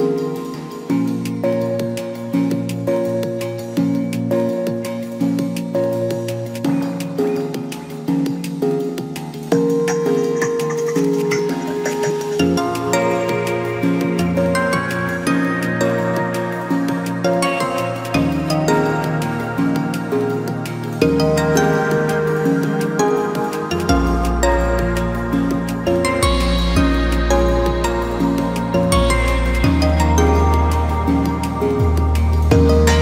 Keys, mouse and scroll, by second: 0.3-1.6 scroll up 2, 1.6 click, 3.7 e, 6.7 a, 7.1-8.9 right drag, 8.9 click, 10.9 g, 12.8 click, 13.7 g, 15.5 click, 15.7-16.3 scroll down 2, 16.3-17.5 shift+middle drag, 17.5 e, 20.7 ctrl+KP_Add, 21.6-24.6 right drag, 24.7-27.6 drag, 27.6-28.1 scroll up 1, 28.1 click, 29.1 click, 30.7 click, 31.4 click.